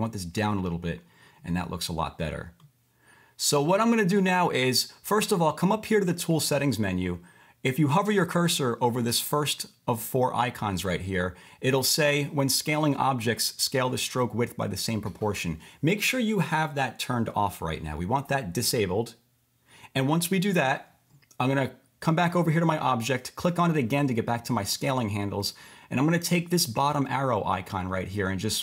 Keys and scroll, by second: 19.7 v.